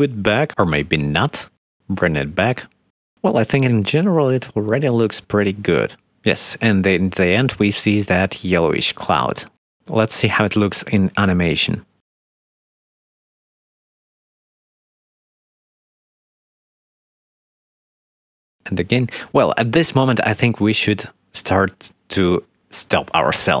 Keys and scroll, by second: 5.0 x, 11.1 space, 20.0 space.